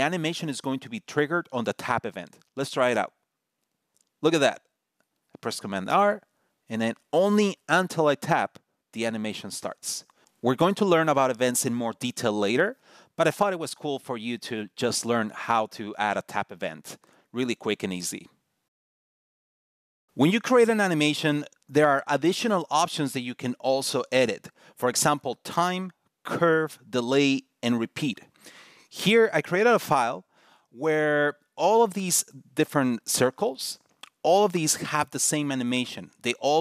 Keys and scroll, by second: 5.5 super+r, 6.9 super+r.